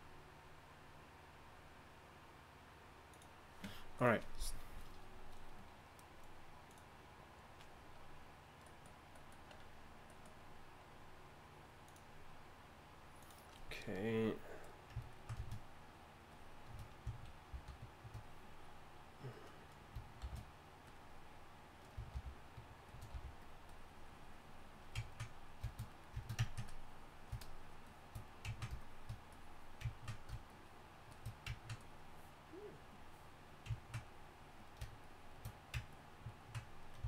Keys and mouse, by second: 17.5 shift+d, 20.2 shift+f, 22.1 shift+f, 28.6-36.8 drag, 36.9 click.